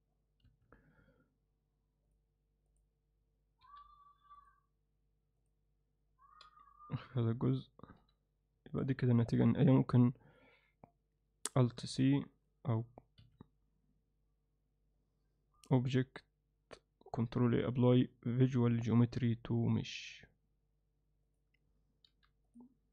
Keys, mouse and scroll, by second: 11.6 alt+c, 14.7-21.7 right drag, 22.1 alt+h.